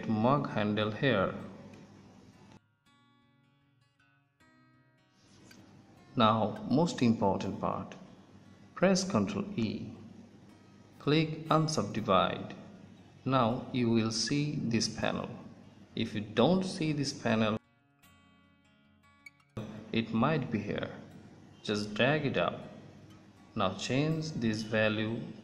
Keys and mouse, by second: 0.3 middle click, 4.2 middle click, 9.6 ctrl+e, 20.0-21.9 drag, 23.1-25.1 drag.